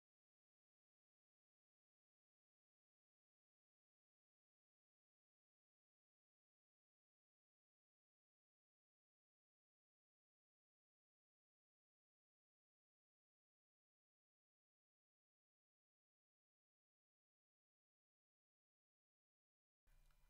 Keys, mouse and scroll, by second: 2.5 click, 3.5 g, 5.6 g, 8.6 click, 9.7 r, 11.0 click, 19.0-20.2 middle drag.